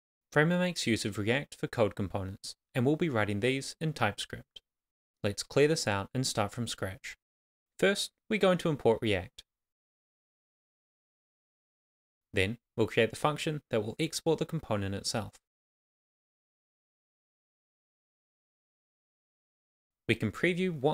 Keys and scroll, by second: 8.2 Return, 9.3 shift+s, 10.2 shift+[, 10.3 shift+], 10.6 Return, 12.2-14.9 typing, 14.1 Return, 16.0 shift+., 16.6 shift+,, 17.2 shift+., 17.4 Left, 18.9 shift+[, 18.9 shift+], 19.0 Left, 20.0 Tab.